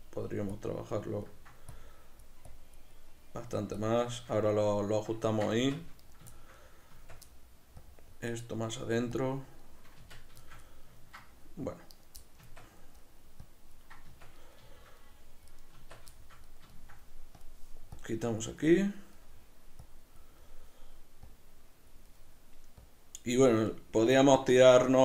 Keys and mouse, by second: 0.5 click, 1.2 ctrl+middle click, 1.7 click, 2.9 middle click, 3.8 click, 4.1-6.0 shift+middle drag, 5.6 b, 5.7 Tab, 6.0 right click, 6.4-7.8 shift+middle drag, 6.9 Tab, 7.1 b, 7.8 click, 8.6 middle click, 9.2 click, 9.6-11.9 middle drag, 10.0 b, 10.1 Tab, 11.9 right click, 12.4 Tab, 12.4-13.4 middle drag, 13.4 click, 14.1 b, 14.2 Tab, 14.2 click, 14.4-15.8 middle drag, 15.8 Tab, 15.9 b, 16.1-17.4 shift+middle drag, 17.4 click, 18.6-19.8 middle drag, 19.8 click, 20.3 middle click, 21.3 click, 22.1 middle click, 22.8 click, 23.7-25.0 middle drag.